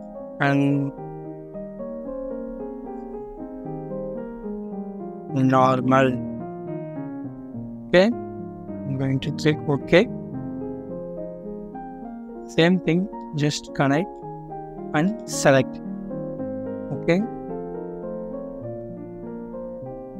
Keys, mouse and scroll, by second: 1.6-2.3 typing, 3.7-5.6 typing, 14.3 scroll down 1, 15.1 typing, 15.3-16.2 scroll down 1, 16.2 typing.